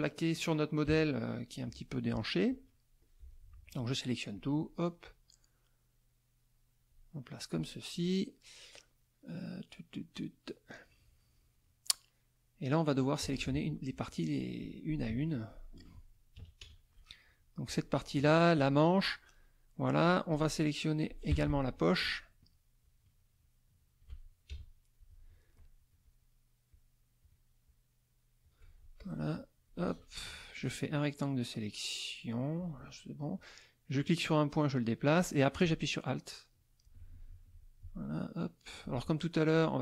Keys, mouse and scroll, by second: 0.8 KP_Subtract, 1.4 middle click, 2.2 middle click, 3.0 click, 4.3-7.1 drag, 8.2 middle click, 9.0 middle click, 10.2 middle click, 13.2 z, 13.3 click, 14.0 middle click, 14.5 middle click, 15.1 F2, 16.3 KP_Subtract, 16.6 KP_Add, 17.6 click, 18.5 shift+click, 20.3-21.6 drag, 21.3 Escape, 22.0 shift+click, 22.8 shift+click, 24.5 shift+KP_Add, 26.0 shift+click, 26.7 shift+click, 27.6 shift+click, 28.9-30.2 shift+drag, 30.5-32.7 drag, 33.9-37.0 drag, 37.5-38.9 alt+drag, 39.4 click.